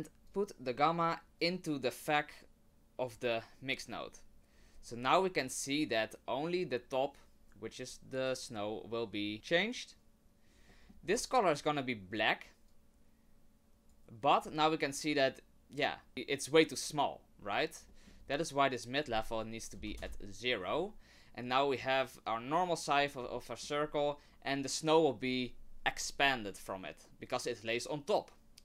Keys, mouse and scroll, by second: 0.3 click, 1.4 click, 10.7 middle click, 11.1-11.6 scroll up 1, 11.6 click, 11.6-13.7 scroll up 1, 17.9 middle click, 18.1 scroll down 1, 18.2-18.9 scroll up 3, 18.9 click, 23.0 scroll down 1, 23.3 shift+middle click, 26.8 middle click, 28.5-28.6 scroll down 2.